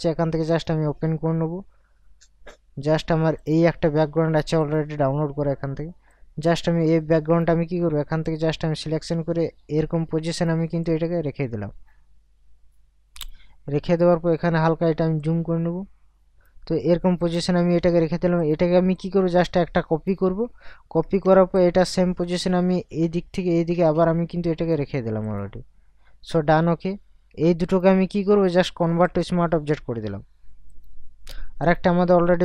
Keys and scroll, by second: 21.0 ctrl+t.